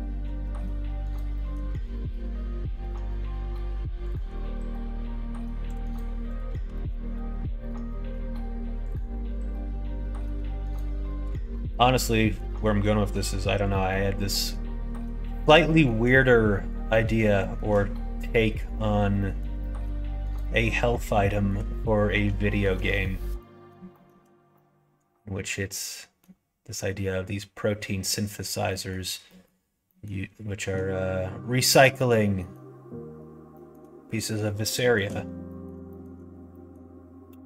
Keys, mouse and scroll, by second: 1.3 middle click, 5.6 click, 6.7 alt+z, 7.0 click, 7.2 middle click, 8.7 middle click, 9.4 middle click, 10.0 middle click, 10.8 middle click, 11.4 middle click, 12.2 middle click, 12.9 middle click, 13.7 middle click, 14.2 middle click, 14.9 middle click, 15.6 middle click, 16.5 middle click, 16.9 middle click, 17.3 shift+middle click, 18.2 middle click, 19.1 middle click, 19.5 middle click, 20.3 middle click, 21.2 shift+middle click, 22.0 middle click, 22.4 shift+middle click, 22.8-24.0 middle drag, 24.5-26.1 middle drag, 28.6 middle click, 29.2 middle click, 29.8 middle click, 31.9 middle click, 32.3 middle click, 33.5 middle click, 34.7 shift+middle click, 35.4 middle click, 35.8 shift+middle click, 36.4 middle click.